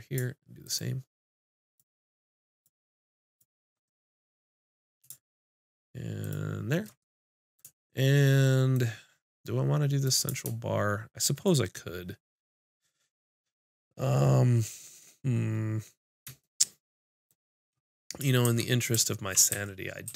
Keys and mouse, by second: 3.9-7.9 middle drag, 12.3 middle click, 12.8 middle click, 15.5 middle click, 18.4 shift+f.